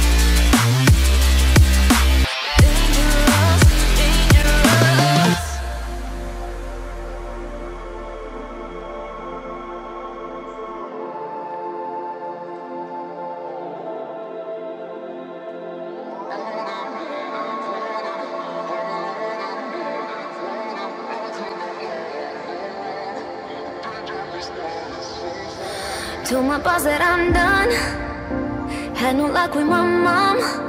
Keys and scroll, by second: 21.5 t.